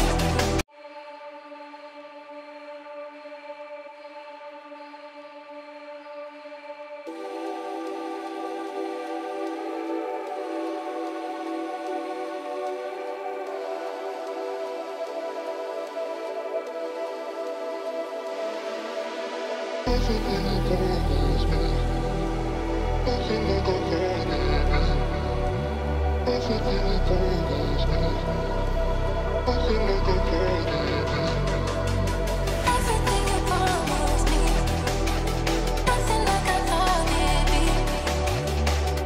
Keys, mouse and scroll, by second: 0.7 right click, 2.3 double click, 4.2 2, 5.3 typing, 6.7 right click, 7.3 F12, 8.1 double click, 11.4 F12, 12.2 Return, 14.2 right click, 14.9 F12, 15.7 double click, 19.5 Right, 19.7 Right, 20.1 Up, 21.4 double click, 22.3 ctrl+z, 23.0 double click, 25.5-25.8 typing, 25.7 shift+Tab, 26.8 Return, 30.6 double click, 31.7 ctrl+z, 36.4 g.